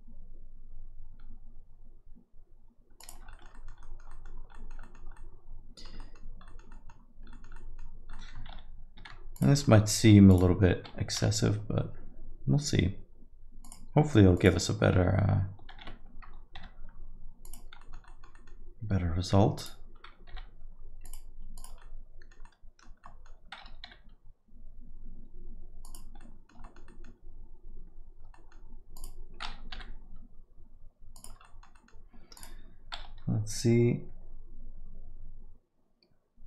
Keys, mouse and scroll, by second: 3.3 alt+middle click, 3.5 middle click, 3.8 alt+middle click, 4.1 middle click, 4.3 scroll down 1, 4.5 alt+middle click, 4.8 middle click, 5.1 alt+middle click, 6.2 scroll down 1, 6.4 alt+middle click, 6.7 middle click, 7.3 alt+middle click, 7.5 middle click, 8.1 middle click, 8.5 shift+z, 9.0 shift+z, 9.3 click, 9.6 alt+middle click, 10.3 click, 11.1 g, 14.3 click, 15.0 shift+z, 15.7 shift+z, 16.6 g, 17.8 middle click, 18.0 alt+middle click, 18.3 middle click, 19.5 click, 20.3 g, 21.5 click, 21.8 alt+middle click, 22.4 alt+middle click, 23.0 alt+middle click, 24.1 g, 26.2 middle click, 26.6 alt+middle click, 26.8 middle click, 28.3 alt+middle click, 28.9 click, 29.7 g, 31.4 alt+middle click, 31.7 middle click, 32.3 click.